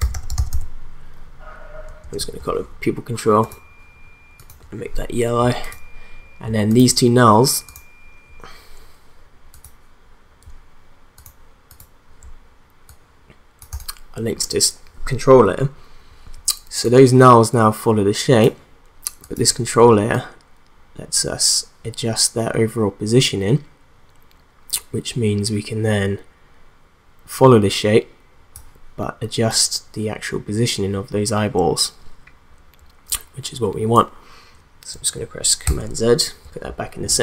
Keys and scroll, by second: 0.0-1.0 typing, 2.0 Return, 35.6 ctrl+z.